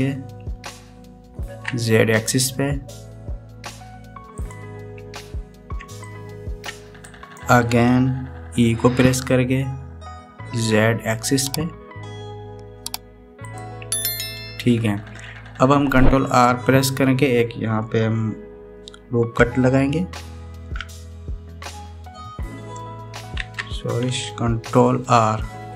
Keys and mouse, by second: 6.8 shift+middle click, 7.9 right click, 9.6 e, 21.2 shift+r, 24.2 ctrl+z.